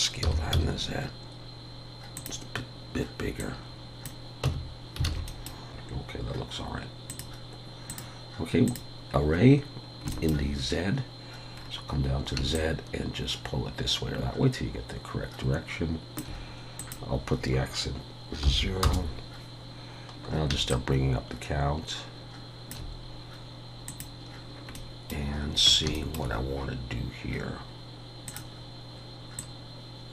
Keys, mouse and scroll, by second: 0.2 s, 3.4 click, 4.4 Tab, 5.1 alt+a, 5.3 middle click, 5.5 scroll down 3, 5.8 click, 7.1 click, 7.9 click, 9.1 scroll down 1, 10.0 scroll down 3, 10.1 shift+middle click, 11.6 scroll down 1, 12.5 shift+click, 16.8 click, 20.7 shift+click, 23.9 click, 24.7 middle click, 25.9 shift+middle click, 28.3 click.